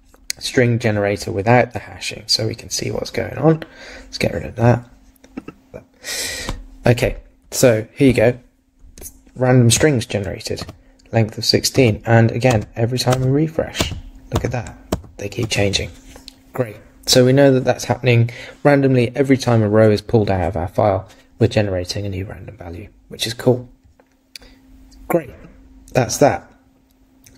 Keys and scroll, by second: 10.6 super+r.